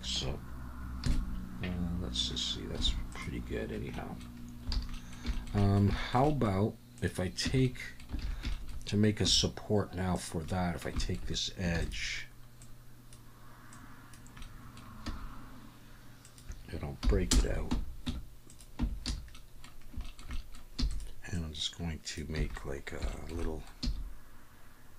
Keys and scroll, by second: 1.0 KP_3, 2.8 alt+a, 4.7 alt+a, 7.4 Tab, 8.2 alt+a, 9.2 2, 11.7 shift+d, 15.8 s, 17.0 p, 18.1 Tab, 18.8 Tab, 19.1 a, 20.8 e, 22.4 a, 23.8 e.